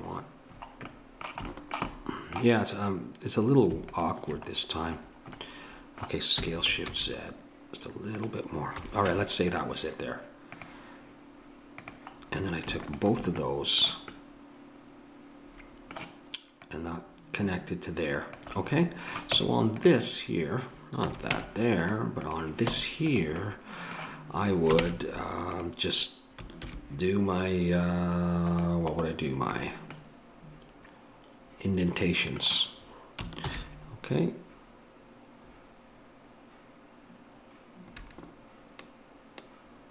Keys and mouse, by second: 0.5 middle click, 0.6 middle click, 3.1 middle click, 3.9-5.1 drag, 5.1-8.2 middle drag, 8.8 a, 9.1 Tab, 10.5-12.2 drag, 16.6-18.3 drag, 19.3 Tab, 21.1 a, 21.3 Tab, 22.6 Tab, 24.8 ctrl+Tab, 26.6 ctrl+r, 33.4 ctrl+b.